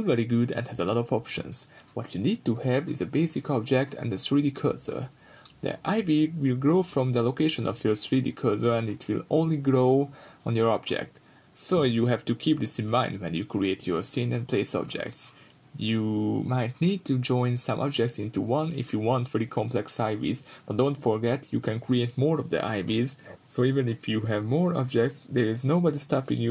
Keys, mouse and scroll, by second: 1.3 Return, 6.8 ctrl+z, 9.4 scroll down 1, 9.6-13.8 middle drag, 10.1-10.5 scroll up 1, 11.1-12.2 scroll down 1, 12.4 ctrl+z, 13.8-18.7 drag, 15.6 Return, 17.4 Return, 18.0-18.6 scroll down 2, 18.1 middle click, 18.7 shift+right click, 20.1 click, 21.2-26.0 middle drag, 22.6 scroll up 2, 23.3 ctrl+z, 26.0-26.5 drag.